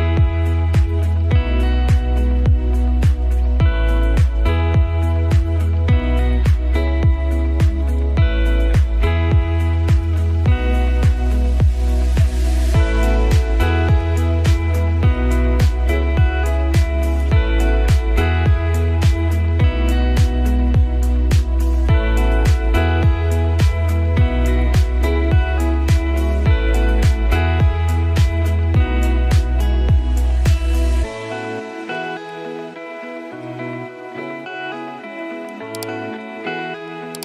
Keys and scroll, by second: 7.9 ctrl+z, 8.6 ctrl+space.